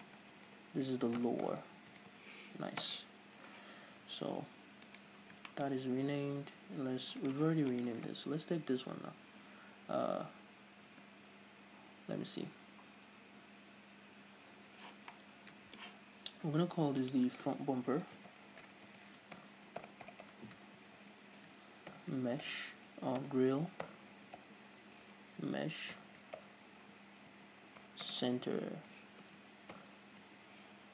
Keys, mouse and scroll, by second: 5.4 right click, 5.8 scroll down 2, 6.0-7.8 shift+middle drag, 6.3-6.8 scroll up 2, 6.8-7.8 scroll down 2, 7.8-9.2 right drag, 9.2-12.3 scroll down 2, 12.3-13.2 scroll down 1, 15.7-17.6 middle drag, 17.6-30.9 drag.